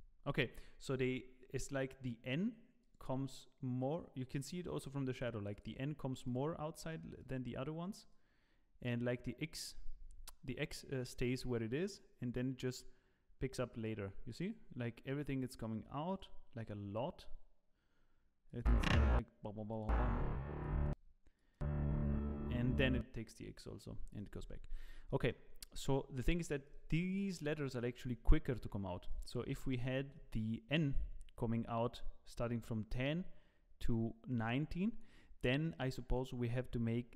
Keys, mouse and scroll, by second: 25.1 middle click, 26.6 click, 27.0 click, 29.2 click, 32.3 click.